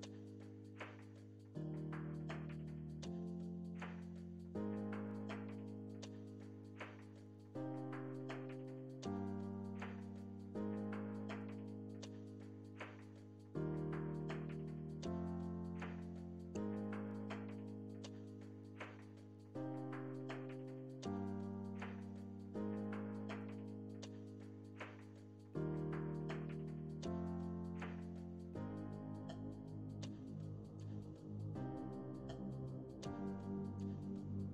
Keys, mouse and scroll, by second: 0.9 middle click, 1.3-2.6 ctrl+drag, 2.6 middle click, 3.5 f, 4.3-10.1 ctrl+drag, 10.1 middle click, 10.9-12.7 drag, 12.7-13.9 middle drag, 13.9 click, 14.6 middle click, 15.2-17.6 ctrl+drag, 17.6 middle click, 18.1-19.6 ctrl+drag, 19.6 middle click, 20.0 ctrl+click, 20.4-22.0 middle drag, 22.0-23.6 ctrl+drag, 23.6-24.6 ctrl+middle drag, 24.6 ctrl+click, 25.4 middle click, 26.0 ctrl+click, 26.8-28.3 ctrl+middle drag, 28.3 space, 28.9-31.9 drag, 33.3 space, 34.3 f.